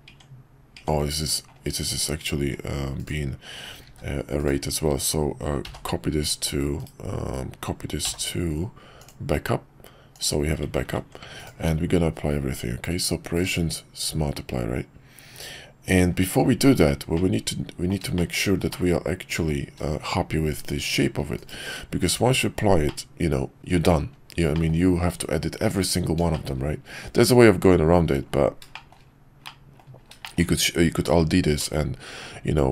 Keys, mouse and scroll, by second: 2.4 ctrl+`, 3.9 shift+d, 5.6 m, 6.8 /, 8.0 m, 10.8 ctrl+`, 11.6 ctrl+q, 13.9 q, 17.1-17.9 middle drag, 18.1 shift+middle drag, 18.7-19.5 middle drag, 22.8-23.6 middle drag, 24.5 middle click, 26.3 shift+middle click, 28.7 shift+middle drag, 29.4-29.8 middle drag, 30.2 shift+middle click.